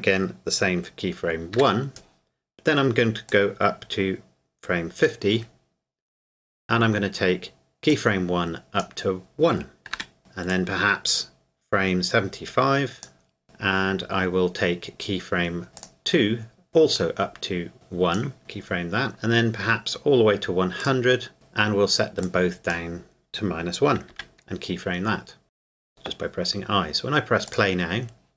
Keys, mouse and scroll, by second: 3.3 click, 7.9 click, 10.5 click, 15.7 click, 17.7 click, 20.8 click, 22.2 click, 25.7 click, 27.5 click.